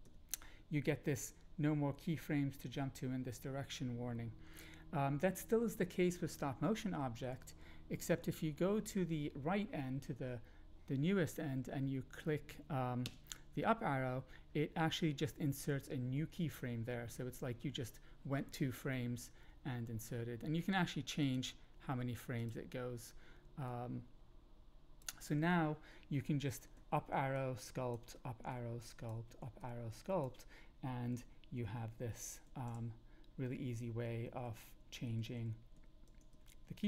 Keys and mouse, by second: 0.0 Down, 7.3 Up, 7.5 Up, 8.0 Up, 8.2 Up, 13.0 Up, 21.2 click, 22.5-25.0 drag, 26.8 Up, 27.3 click, 28.1 Up, 28.5 click, 29.6 Up, 29.6 click, 31.1 Down, 31.3 Down, 31.4 Down, 31.6 Down, 32.4 Up, 33.3 Up, 33.6 Up, 34.2 Down, 34.4 Down, 34.6 Down, 34.9 Up, 35.1 Up, 35.3 Up, 35.7 Up, 36.0 Down, 36.3 Down, 36.8 Down.